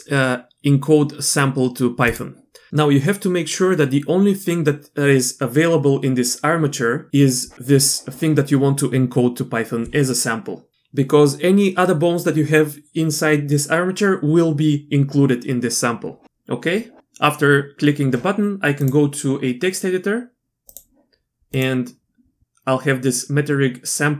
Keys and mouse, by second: 18.8-20.7 drag, 21.5-24.1 drag.